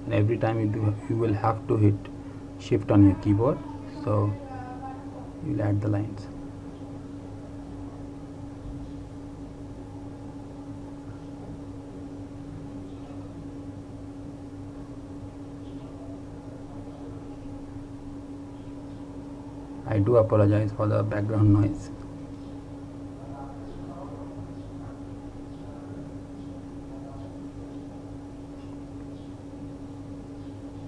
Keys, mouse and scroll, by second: 3.4 shift+click, 7.4 shift+click, 11.4 shift+click, 17.0 shift+click, 21.1 click, 27.6 click.